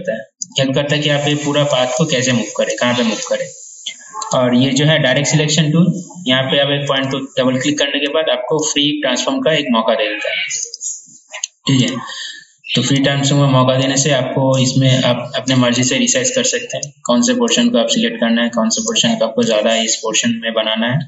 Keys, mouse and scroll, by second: 4.4 right click, 5.2-17.6 drag.